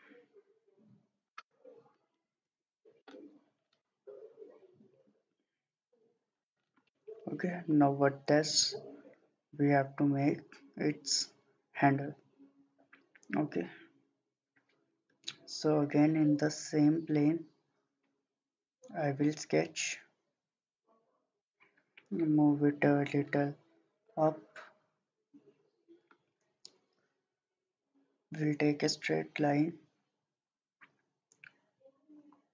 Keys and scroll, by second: 1.8-2.6 typing.